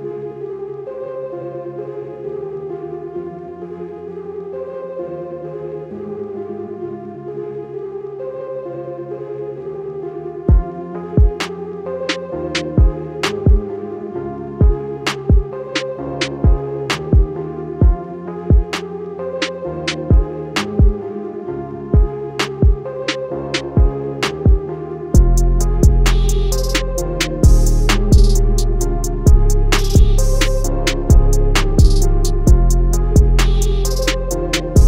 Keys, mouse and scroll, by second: 13.9 click, 20.0 z, 20.7 click, 24.4 click, 26.8 click, 27.9 click.